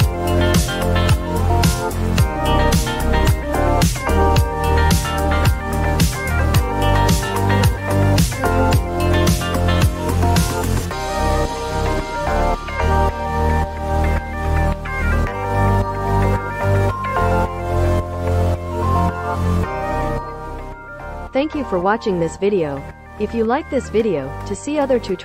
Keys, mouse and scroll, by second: 1.6 click, 3.4 click, 3.8 click, 4.3 click, 7.1 click, 10.5 click, 17.9-20.5 drag.